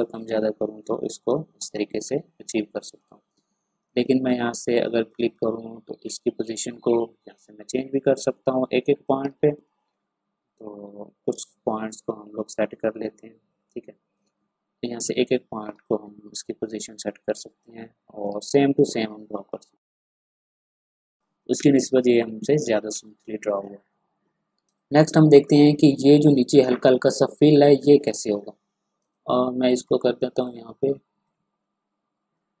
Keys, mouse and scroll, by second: 2.0 ctrl+scroll up 1, 2.9-9.2 drag, 9.2 space, 9.3 click, 10.6 ctrl+scroll down 1, 11.3 ctrl+space, 11.4-15.7 drag, 15.7 space, 15.8 click, 18.2 space, 18.5 click, 19.9 click, 20.2 space, 20.5 click, 20.6 space, 20.7-21.1 ctrl+scroll down 2, 20.8 click, 21.1 click, 22.3 space, 22.3 ctrl+scroll down 1, 23.2 ctrl+space, 23.3 click, 23.8 ctrl+scroll up 1, 24.6 ctrl+space, 24.7 click, 27.5-28.0 ctrl+scroll down 1, 28.0 ctrl+space, 28.2 click, 29.0 space, 29.1-31.2 drag, 31.2-32.6 drag.